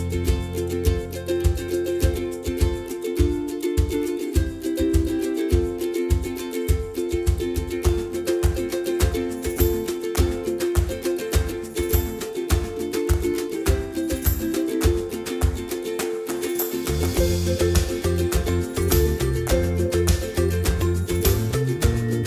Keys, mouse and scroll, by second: 0.7 Tab, 2.1-6.2 middle drag, 3.9 Tab, 6.0 scroll up 1, 6.6-9.1 middle drag, 9.3 middle click, 9.6 middle click, 13.1 scroll down 1, 13.6 middle click, 13.9-20.8 middle drag, 14.1 a, 15.2 a.